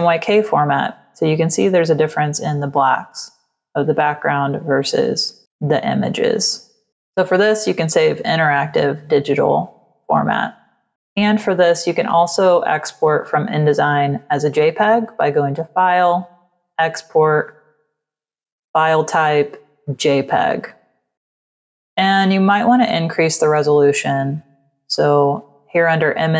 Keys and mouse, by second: 6.9 click, 14.4 click, 16.2 click, 17.5 click, 19.7 click, 20.5 click, 21.1 BackSpace, 23.8 click.